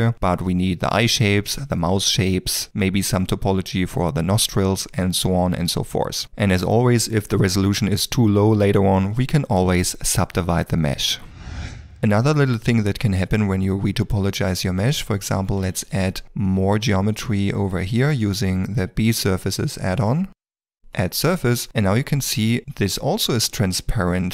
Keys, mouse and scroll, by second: 0.7 shift+middle click, 0.8 d, 1.0 click, 1.3 l, 1.6 l, 1.8 d, 3.5 f, 3.7 1, 3.9 g, 4.9 ctrl+middle click, 5.0 middle click, 5.2 shift+click, 5.4 d, 5.6 click, 5.9 d, 6.1 click, 6.6 click, 7.0 click, 7.7 middle click, 8.2 g, 9.0 middle click, 9.2 g, 9.5 middle click, 9.7 g, 9.9 ctrl+middle click, 10.1 middle click, 10.2 shift+middle click, 10.4 ctrl+middle click, 10.5 middle click, 10.6 ctrl+middle click, 10.8 shift+middle click, 11.2 ctrl+middle click, 13.5 middle click, 15.0 ctrl+middle click, 15.4 shift+middle click, 15.6 a, 16.2 d, 16.4 click, 17.8 click, 18.3 click, 18.8 d, 19.7 click, 21.2 click, 22.6 middle click.